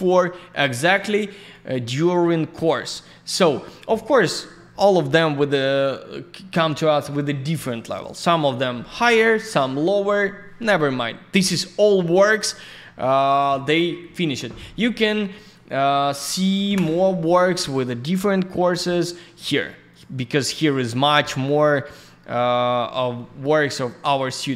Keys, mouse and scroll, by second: 0.7 scroll up 1, 1.5 click, 2.5 click, 2.6 click, 3.6 click, 7.1 click, 12.5 click, 15.3 click, 15.5 click.